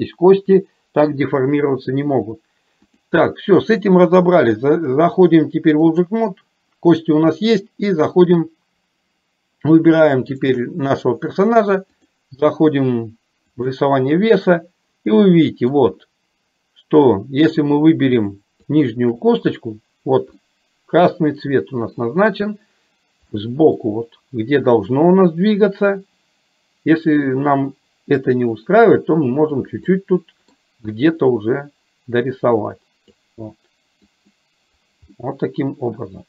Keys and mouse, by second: 3.0 click, 4.8-6.2 drag, 8.1-9.2 drag, 10.3 shift+click, 12.1-14.0 drag, 15.2 middle click, 18.7 shift+click, 20.5-22.3 middle drag, 23.3 middle click, 28.7-29.7 drag, 30.0 middle click, 31.3-33.3 drag, 34.1 click, 35.1-36.2 middle drag.